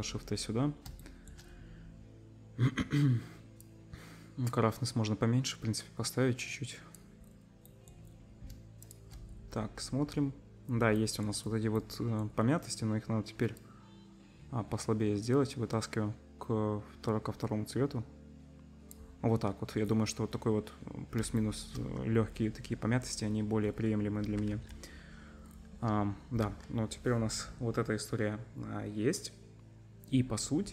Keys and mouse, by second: 1.0-1.4 shift+drag, 3.6-8.9 middle drag, 8.9-11.0 ctrl+shift+drag, 11.0 middle click, 11.1-13.6 drag, 24.5 ctrl+s, 26.4 z.